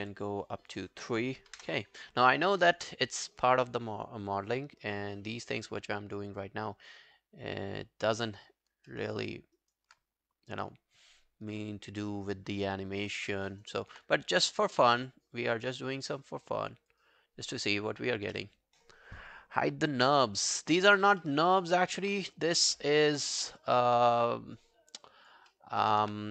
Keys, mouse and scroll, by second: 7.8 scroll up 3, 8.9 scroll up 1, 9.2 alt+right click, 9.6 alt+right click, 13.3 alt+middle click, 13.5 alt+right click, 18.3 double click, 21.3 alt+middle click, 21.5 alt+right click, 21.8 alt+click, 22.0 q, 22.3 alt+middle click, 22.6 alt+right click, 22.7 alt+click, 25.5 alt+middle click, 25.7 alt+right click.